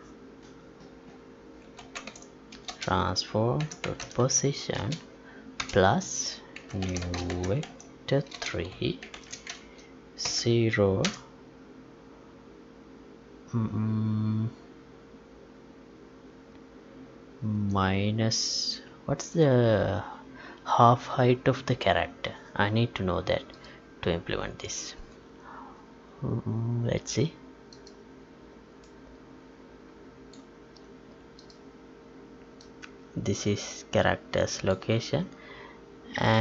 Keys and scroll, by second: 7.0 space, 9.5 Left.